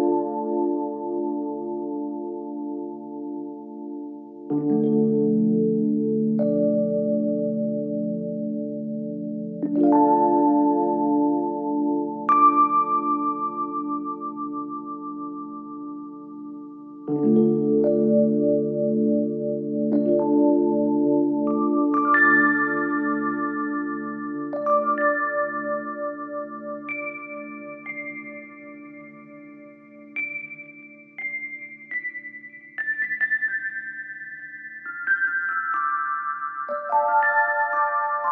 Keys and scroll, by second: 20.8 ctrl+z.